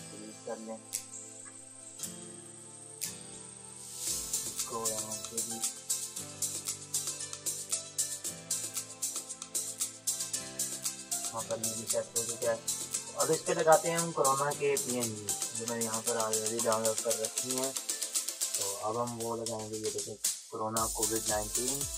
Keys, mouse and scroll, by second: 1.1 ctrl+z, 1.6 click, 1.7 click, 3.4 space, 3.5 click, 4.1 ctrl+space, 4.3 click, 4.4 [, 4.7 [, 4.9 [, 5.0-7.7 drag, 7.9 space, 8.1-10.5 drag, 10.5 ctrl+-, 13.6 click, 16.3 BackSpace, 18.2 click.